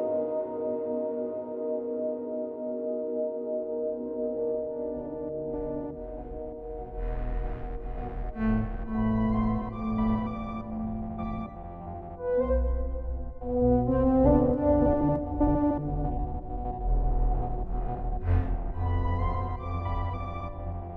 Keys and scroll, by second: 4.5 ctrl+t, 13.4 ctrl+j, 14.5 ctrl+t.